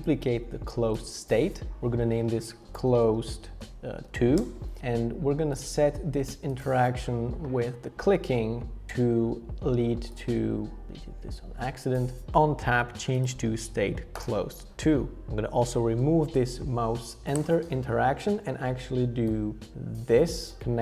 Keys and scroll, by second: 2.3-4.0 typing, 4.4 Return, 6.0 typing, 10.8 super+z, 17.3 BackSpace.